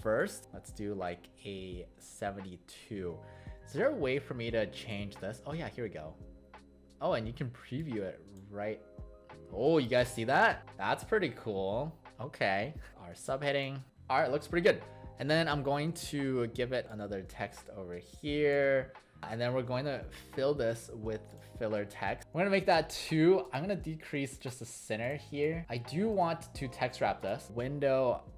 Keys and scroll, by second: 25.6 ctrl+shift+w.